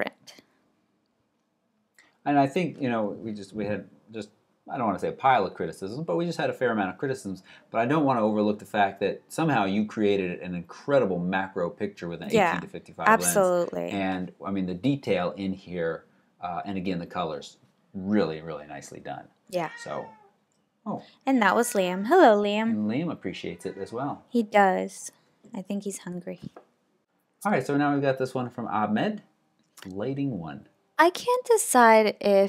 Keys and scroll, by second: 25.5 alt+super+Right.